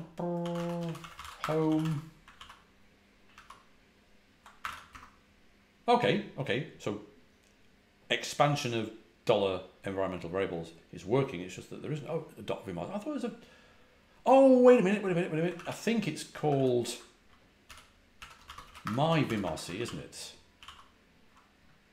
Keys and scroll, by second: 0.0-2.2 typing, 2.3 ctrl+a, 2.3 ctrl+l, 3.2 ctrl+a, 3.3 ctrl+l, 4.5 Escape, 4.6 k, 4.8 Return, 15.5 ctrl+a, 15.5 ctrl+h, 16.4 ctrl+a, 16.5 ctrl+h, 17.6-19.7 typing, 19.7 ctrl+a, 19.8 ctrl+l, 20.5 ctrl+a, 20.6 ctrl+l.